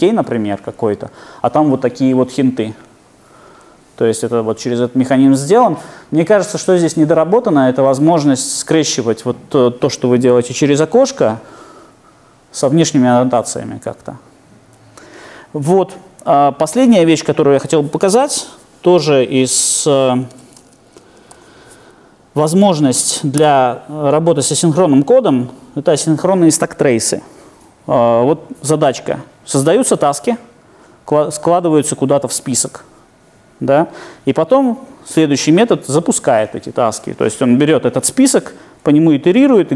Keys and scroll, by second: 16.8 super+F2, 16.9 super+F2, 18.2 super+1, 19.1 Down, 20.3 super+e.